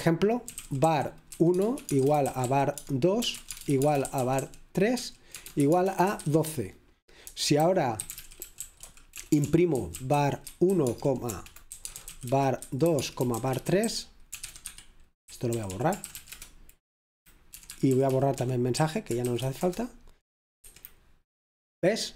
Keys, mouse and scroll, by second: 0.0-7.3 typing, 8.2 Escape, 10.7 typing, 11.9-16.4 typing, 17.5-20.7 typing.